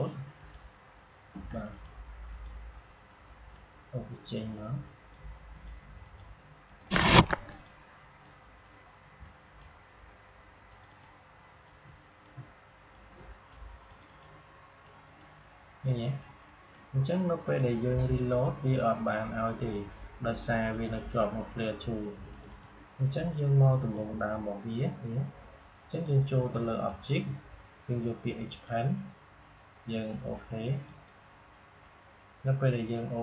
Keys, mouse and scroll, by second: 22.2 click, 26.8 click, 31.2 click.